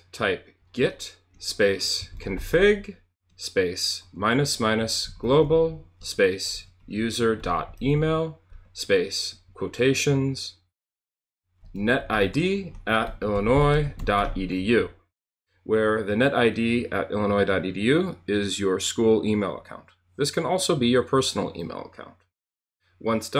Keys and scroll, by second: 0.0-9.3 typing, 11.4-15.1 typing.